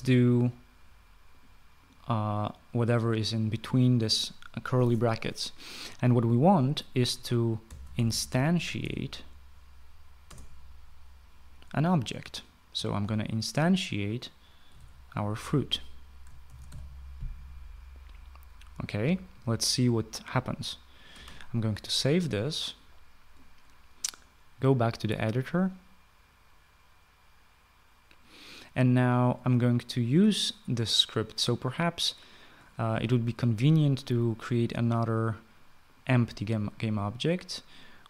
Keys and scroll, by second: 7.9-9.8 typing, 10.7 Return, 13.0-13.7 typing, 14.9-17.1 typing, 21.6 Return, 21.6 ctrl+s.